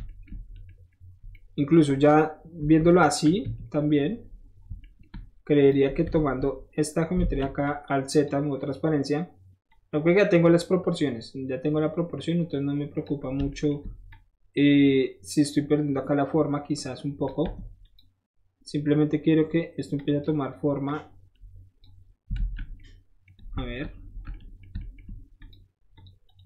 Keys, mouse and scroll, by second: 0.1-0.7 shift+middle drag, 0.9-1.3 shift+middle drag, 1.3 scroll up 1, 1.8-2.9 shift+middle drag, 2.7 KP_1, 5.3 shift+middle click, 5.6 shift+click, 6.0 Tab, 7.2 alt+z, 7.6 click, 9.7-13.1 drag, 14.1 shift+click, 15.4-17.3 shift+drag, 17.6 Tab, 17.8 click, 19.1 middle click, 19.4 middle click, 20.0 drag, 20.9-21.8 drag, 22.4 alt+z, 23.3 middle click, 23.6-24.0 shift+middle drag, 24.0-25.2 alt+shift+middle drag, 25.2 alt+shift+middle drag, 25.4 alt+shift+click, 26.0 alt+shift+click, 26.2 alt+shift+right click.